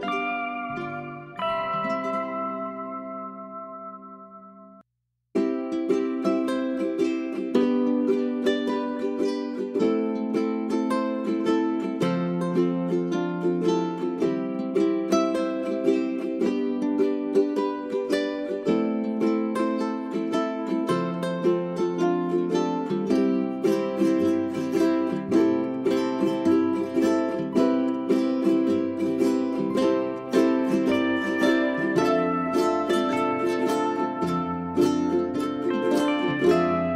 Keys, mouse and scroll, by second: 0.0-1.7 scroll up 1, 1.7 click, 2.0 right click, 2.1 click, 4.0 scroll up 1, 4.3 click, 5.5 scroll up 1, 6.2-11.1 drag, 12.1-12.7 scroll down 1, 12.7 click, 13.3-13.6 scroll down 1, 13.6 middle click, 13.7-15.3 scroll up 1, 15.3 click, 15.5 right click, 15.8 scroll up 1, 16.0 click, 17.1 middle click, 17.6-21.5 drag, 21.5 scroll up 1, 21.8-24.0 drag, 24.3-24.9 scroll down 1, 24.9-27.3 scroll up 1, 27.4 click, 28.1 scroll down 1, 28.5 middle click, 29.5 click, 31.0 ctrl+g, 31.3 click, 33.1 space, 33.4 shift+click, 34.7 right click, 35.2 End, 36.3 click.